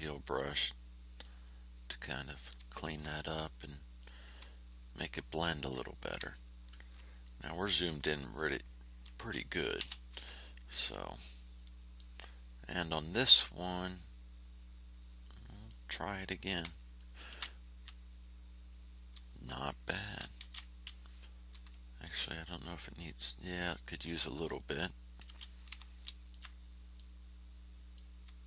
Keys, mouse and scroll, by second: 1.2-2.4 drag, 2.8 ctrl+click, 3.3 ctrl+click, 4.9 ctrl+scroll down 1, 5.8 ctrl+click, 6.1 ctrl+scroll down 1, 6.2-7.4 ctrl+scroll up 6, 7.4 click, 7.9 click, 9.7 r, 10.4 ctrl+scroll down 2, 11.9-15.8 drag, 17.2 ctrl+f, 20.3 ctrl+shift+a, 22.6 ctrl+scroll up 2, 23.5 ctrl+scroll down 2, 25.2 shift+h, 26.3 ctrl+shift+click, 26.9-28.1 drag.